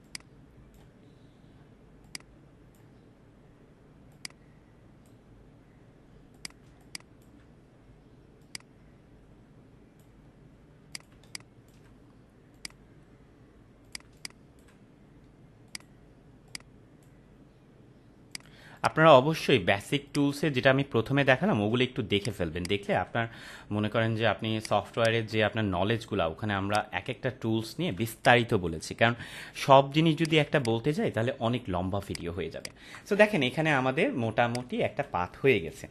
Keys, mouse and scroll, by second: 6.6 space, 6.7 click, 7.1 space, 8.4-10.3 drag, 11.1 space, 11.3-11.9 click, 11.6 space, 12.5 click, 14.1 space, 14.1-14.8 click, 14.5 space, 15.7-17.1 drag, 18.6 space, 18.7-19.3 click, 19.1 space, 20.1 click, 22.3 space, 22.8-23.2 space, 24.5 click, 24.8 space, 25.0 click, 25.3 space, 26.7-27.9 click, 27.9 space, 28.1 click, 28.4-28.7 space, 30.2 click, 30.4 space, 30.6-31.2 click, 30.9 space, 32.0 click, 32.4 space, 32.6 click, 32.9-33.2 space, 33.6 ctrl+-, 34.4-35.0 click, 34.7 space.